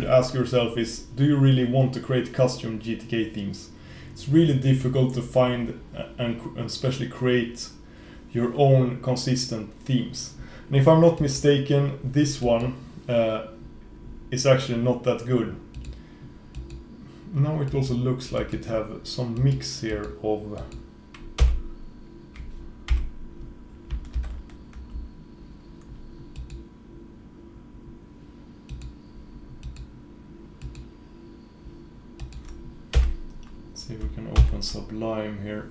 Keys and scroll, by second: 21.5 F4, 24.2 super+e, 33.0 F4, 34.5 super+s.